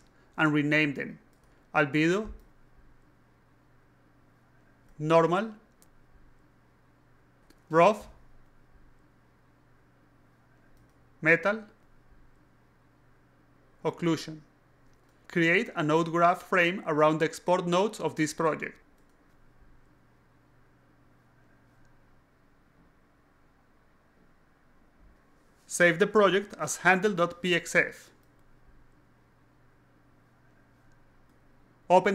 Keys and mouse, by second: 0.6-2.2 typing, 0.6 click, 2.3 alt+click, 3.3 drag, 3.6 click, 4.2 click, 5.3 shift+n, 6.6 click, 7.4 click, 7.8-8.8 typing, 7.8 click, 8.9 click, 9.2 click, 9.9 click, 10.7 click, 10.8-11.6 typing, 11.8 click, 12.1 click, 12.8 click, 13.7 click, 14.0 shift+o, 14.3 i, 15.2 right click, 15.5 o, 16.3 click, 16.6 click, 17.5 click, 18.3 click, 18.9 right click, 19.2 click, 19.4-20.4 typing, 19.5 click, 21.0 right click, 21.4 click, 21.6 click, 22.4 click, 22.6 click, 23.5 click, 24.5 click, 25.9 click, 26.8 click, 27.0-28.1 typing, 29.0 alt+click, 29.3-30.2 alt+drag, 32.0 click.